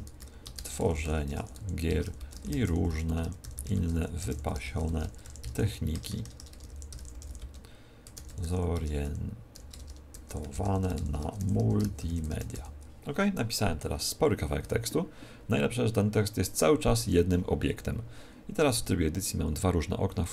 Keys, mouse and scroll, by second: 0.0-12.5 typing, 14.6 Tab, 16.9 r, 18.5 Tab.